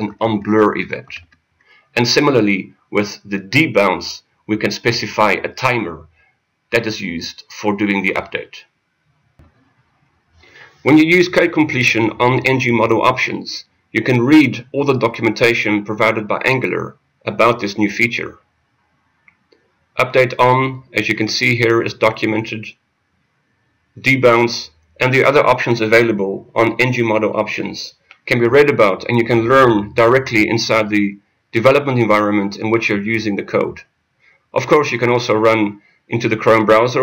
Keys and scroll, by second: 35.4 F6.